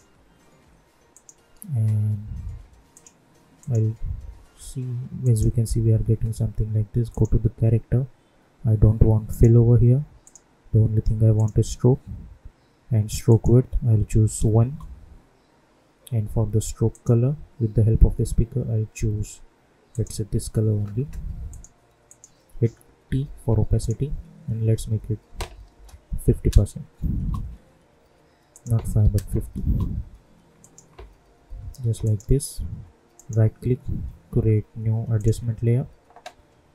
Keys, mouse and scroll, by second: 9.2 click, 14.6 Return, 16.8 click, 19.8 click, 23.0 t, 23.8 click, 27.1 Return, 28.5 click, 29.6 Return, 30.5 click, 31.4 u, 32.0 click, 33.1 right click, 35.1 click.